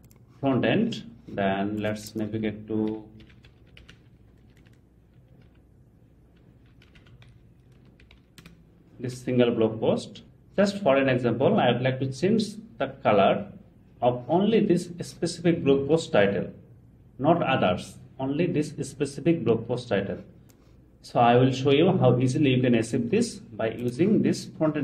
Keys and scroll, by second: 8.4 Return.